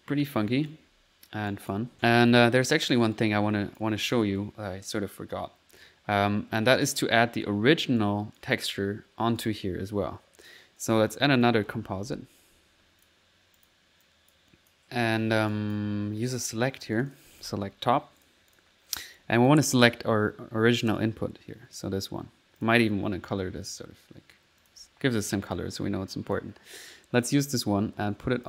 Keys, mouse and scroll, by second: 0.3 middle click, 0.6 click, 0.9 typing, 1.1 click, 1.5 click, 2.0 middle click, 2.4 right click, 3.2 click, 4.0 click, 5.8 click, 6.8 click, 7.7 middle click, 8.0 click, 9.5 click, 10.8 right click, 11.1 right click, 11.4 click, 11.5-12.3 typing, 13.6 click, 14.1 click, 14.6 s, 17.0 click, 17.0-17.5 typing, 18.3 click, 18.6 click, 19.2 click, 22.6 click, 22.9 c, 24.7 click, 24.9 typing, 25.2 middle click, 25.5 click, 26.3 click, 27.3-28.4 drag.